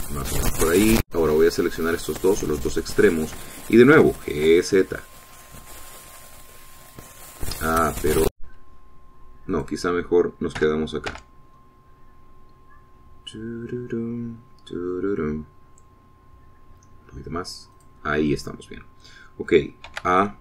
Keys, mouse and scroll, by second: 0.9 click, 2.0 click, 3.6 shift+click, 5.0 g, 5.5 <, 6.8-7.3 scroll up 1, 7.6-8.2 scroll down 2, 8.4-8.9 scroll up 2, 9.5 Escape, 10.6 click, 11.6 g, 12.1 z, 12.8 scroll down 2, 13.5 scroll down 2, 14.6 scroll up 2, 15.2-15.6 scroll down 2, 17.8 scroll down 2, 18.8 click.